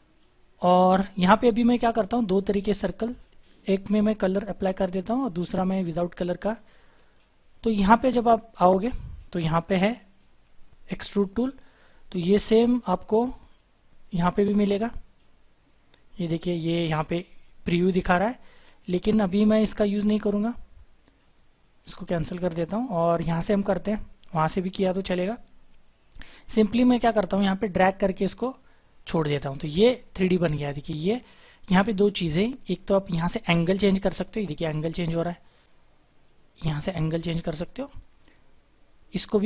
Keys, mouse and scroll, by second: 0.7-1.1 scroll down 1, 1.1-2.0 scroll up 1, 3.0-3.5 scroll up 1, 3.5 ctrl+right click.